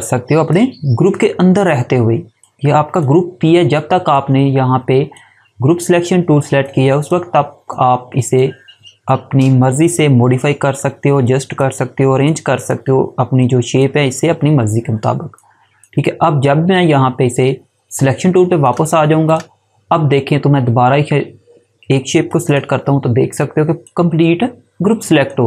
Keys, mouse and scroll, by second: 18.6 click, 22.4 click.